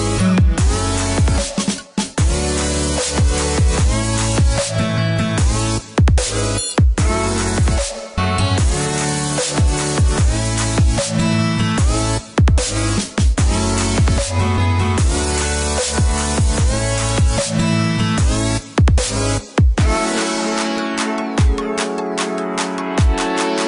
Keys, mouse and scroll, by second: 1.3 KP_1, 1.6 KP_5, 2.8 KP_Enter, 4.8 click, 5.6 click, 6.5-6.9 scroll up 1, 6.9 scroll down 1, 11.2 click, 13.1 space, 13.7 click, 14.8-15.4 scroll up 1, 15.4 click, 16.7 click, 20.6 click, 23.5-23.6 scroll down 1.